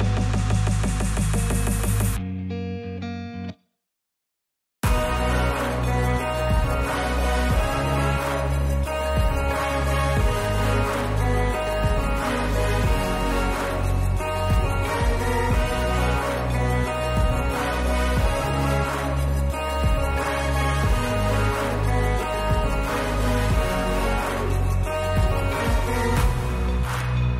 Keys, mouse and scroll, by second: 1.0 click, 1.2 space, 2.1 space, 2.5 middle click, 3.8 click, 5.4 click, 6.3 click, 6.5 space, 8.9 space, 10.1 click, 11.5 space, 12.7 space, 14.5-17.8 drag, 19.4 click, 20.2 click, 20.9-21.2 drag, 22.8 click, 23.5 click, 25.0 w.